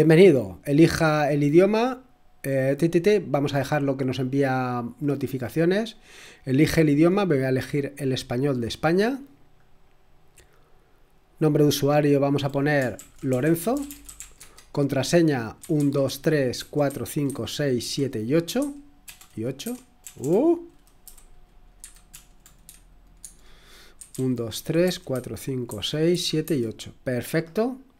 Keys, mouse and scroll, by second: 0.0 click, 2.9 click, 4.8 click, 5.9 click, 6.7-8.7 scroll down 2, 8.7 click, 9.8 click, 11.3 click, 12.9 ctrl+a, 13.0-22.6 typing, 23.2 Tab, 23.7-26.9 typing.